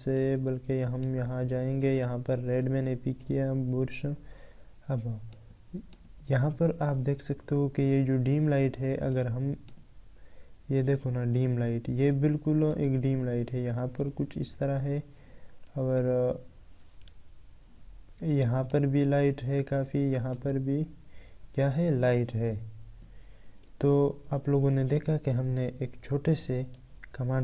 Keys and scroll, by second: 24.6 ctrl+a, 26.9 ctrl+d.